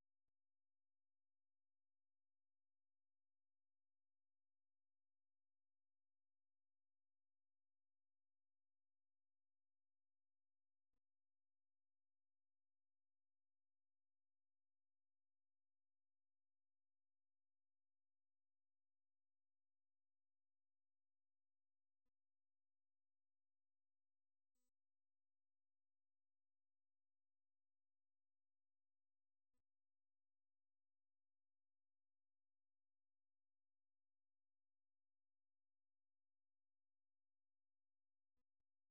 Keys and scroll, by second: 17.6-19.3 typing, 26.2 typing, 28.2-33.0 typing.